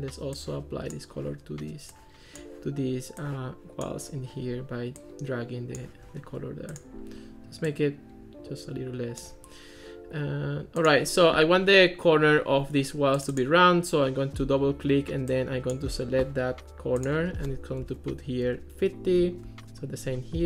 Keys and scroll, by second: 17.9 5, 18.5 Return, 19.2 Escape.